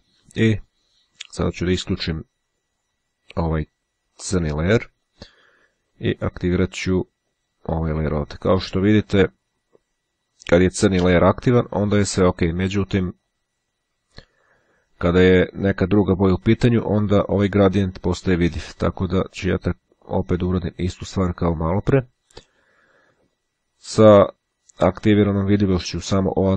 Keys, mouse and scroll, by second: 5.2 click, 7.3 click, 11.1 click, 13.3 click, 21.8 click.